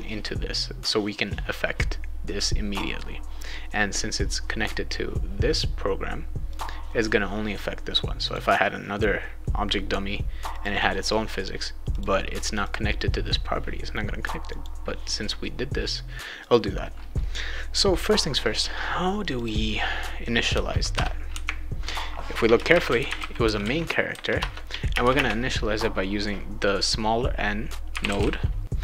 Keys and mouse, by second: 2.4 click, 6.5 click, 8.2 click, 10.5 click, 11.9 click, 12.6 click, 14.5 click, 16.4 click, 19.3 click, 20.5 Return, 20.9 Return, 22.5-25.0 typing, 24.3 Return, 27.7-28.8 typing.